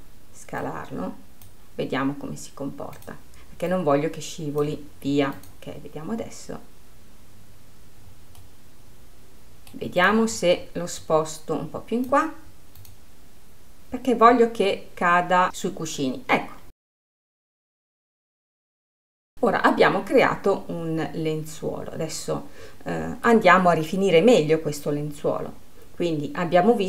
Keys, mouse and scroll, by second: 0.1-1.3 drag, 3.5 click, 5.9-9.1 drag, 9.1 middle click, 9.7-11.5 drag, 13.2-15.5 drag, 15.9 click, 16.5-19.3 middle drag, 19.3 click, 19.9-23.5 middle drag.